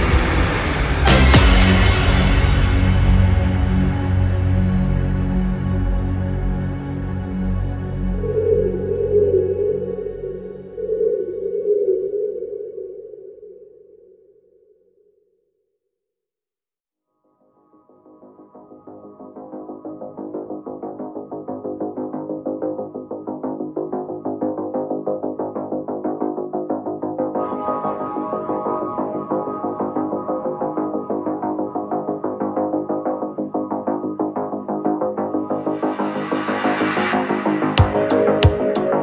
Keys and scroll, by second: 5.5 ctrl+z, 5.8 ctrl+z, 13.4 ctrl+z, 20.7 ctrl+z, 23.0 space, 23.2 ctrl+z, 25.7 ctrl+z.